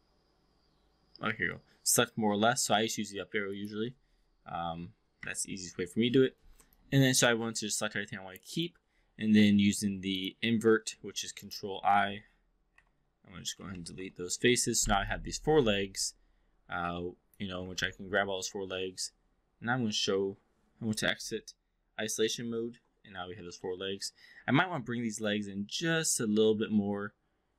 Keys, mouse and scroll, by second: 5.1 Up, 6.7-8.7 alt+drag, 10.2-11.6 drag, 12.7 Delete, 13.6 Down, 15.1-17.3 alt+drag, 17.7 ctrl+a, 22.2 shift+i, 23.6 alt+middle drag, 24.0-25.3 alt+drag.